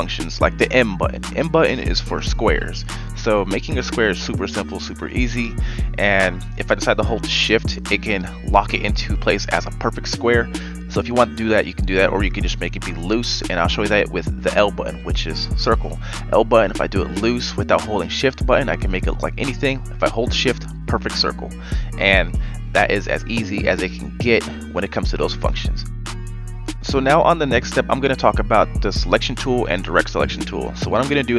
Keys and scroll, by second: 10.0 x, 11.4 v, 13.6 l, 25.2 b, 28.6 v.